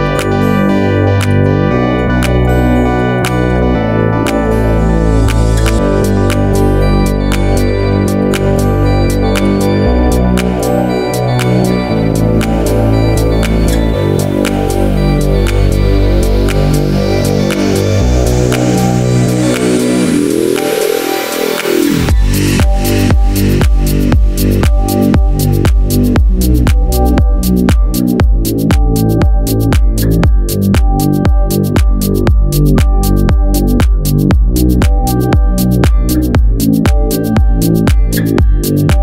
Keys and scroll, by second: 8.0 super+s.